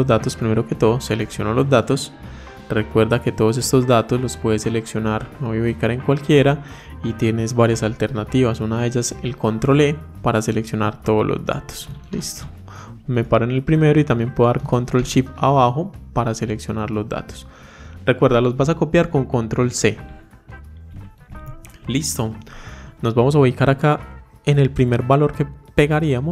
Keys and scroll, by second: 8.6 ctrl+e, 11.9 ctrl+shift+Down, 20.7 ctrl+c.